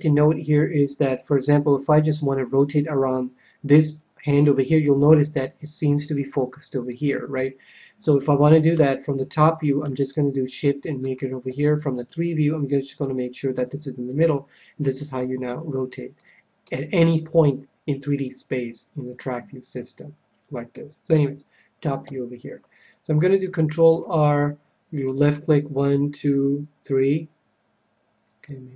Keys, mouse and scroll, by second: 1.3 middle click, 1.7 middle click, 2.4 middle click, 4.4-6.0 middle drag, 6.8-8.4 middle drag, 8.6 KP_1, 10.2-11.4 middle drag, 11.4 KP_3, 12.2-14.0 middle drag, 14.2-15.7 middle drag, 16.1-18.8 middle drag, 21.0 KP_7, 22.0 a, 23.8 ctrl+r, 27.0-28.7 drag.